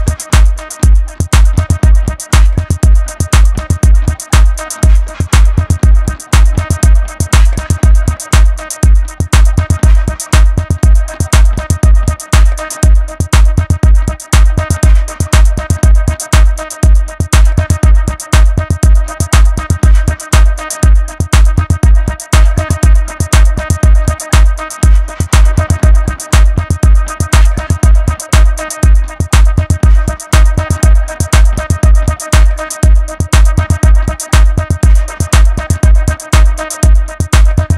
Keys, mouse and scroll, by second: 0.2-1.3 middle drag, 1.3-6.1 right drag, 6.1 click, 7.0 ctrl+shift+click, 7.7-11.6 right drag, 11.6 click, 12.9 ctrl+shift+click, 13.8 g, 16.3-18.3 middle drag, 18.3 Tab, 18.8-19.3 middle drag, 19.3 KP_1, 20.0-21.7 shift+middle drag, 21.7 KP_3, 22.3 KP_1, 22.9-24.1 shift+middle drag, 24.1 Tab, 24.5-27.6 scroll up 2, 28.2 alt+z, 28.9 click, 36.9 click.